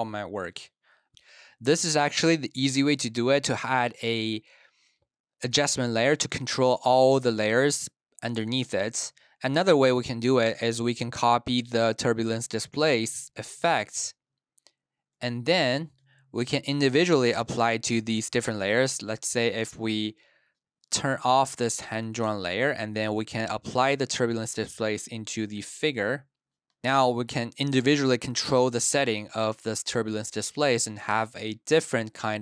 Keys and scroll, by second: 0.0-1.0 typing, 1.0 super+s, 15.0 super+c, 25.8 super+v, 26.6 space.